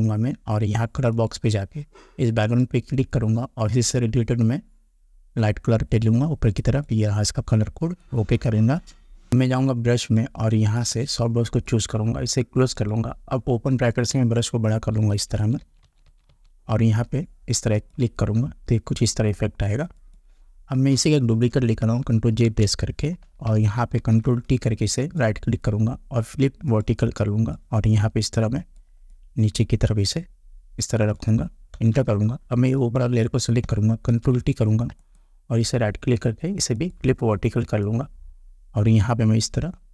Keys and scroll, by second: 0.0 Return, 14.1 ], 22.4 ctrl+j, 24.0 ctrl+t, 28.7 Return, 31.7 Return, 34.1 ctrl+t.